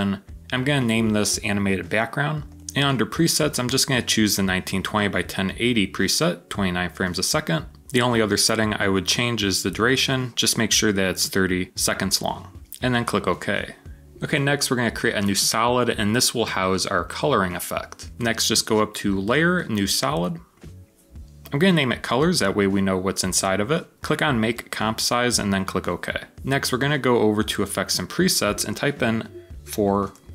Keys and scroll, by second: 21.3-22.9 typing, 29.5-30.3 typing.